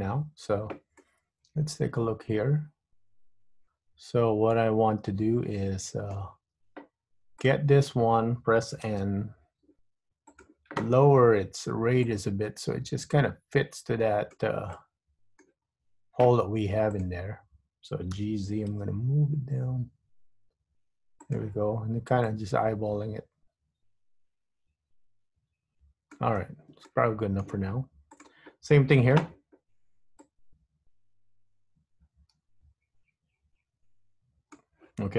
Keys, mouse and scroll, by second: 0.2-1.2 scroll up 2, 1.2 middle click, 6.7 Tab, 7.6 click, 9.0 n, 10.4 click, 12.2 click, 14.8 middle click, 15.8-17.1 scroll up 2, 17.1 click, 18.4 g, 22.3 click, 27.0 shift+middle click, 28.3 click, 30.3 click.